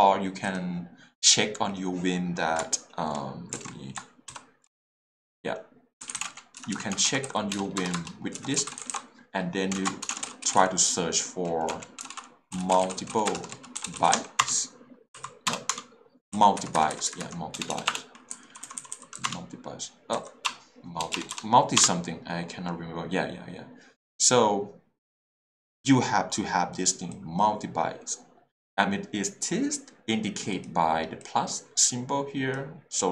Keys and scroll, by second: 3.5 alt+shift+a, 6.0-14.2 typing, 14.4 Return, 15.1 Print, 15.5 BackSpace, 15.7 Return, 16.3 Print, 17.5 BackSpace, 19.1 s, 19.2 Return, 20.1 Print, 20.4 BackSpace, 21.8 Return.